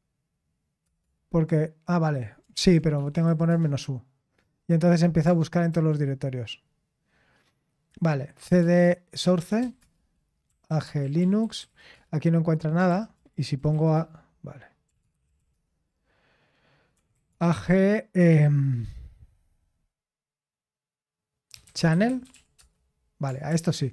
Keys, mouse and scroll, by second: 0.8 typing, 2.5 ctrl+p, 2.7-3.7 typing, 5.7 ctrl+c, 9.1-16.0 typing, 12.9 ctrl+p, 17.1 typing, 21.5-22.8 typing, 23.5 ctrl+p.